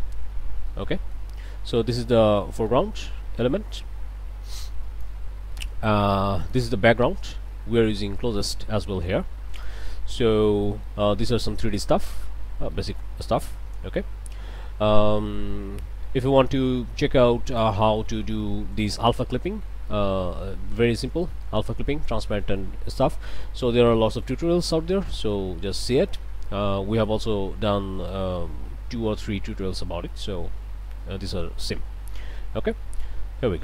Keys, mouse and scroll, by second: 0.2 scroll down 2, 0.7 click, 1.4 scroll down 2, 2.1 scroll down 2, 2.4 click, 3.8-5.2 drag, 5.5 shift+click, 6.4 click, 9.6 click, 10.1 shift+click, 10.7 shift+click, 11.0-11.6 shift+scroll down 2, 12.2 middle click, 12.7 middle click, 13.6 0, 16.2 click, 16.4-17.8 middle drag, 19.9 middle click, 21.2 middle click, 22.6-23.6 middle drag, 24.1 middle click, 28.1-33.6 drag.